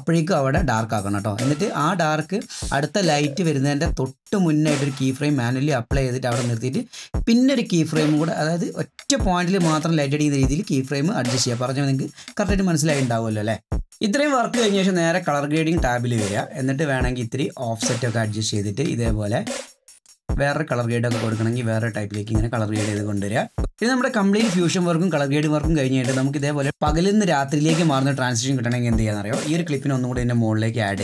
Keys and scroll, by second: 23.6 ctrl+r.